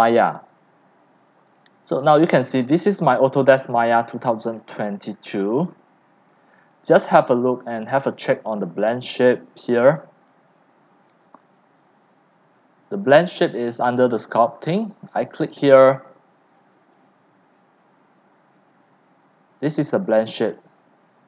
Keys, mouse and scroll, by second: 1.3-2.0 drag, 2.0-4.1 middle drag, 2.0-4.0 scroll, 4.1-6.5 drag, 6.5 alt+right drag, 6.7-8.6 drag, 8.6-9.1 alt+right drag, 9.1-12.1 drag, 13.6 click, 15.6-16.7 drag.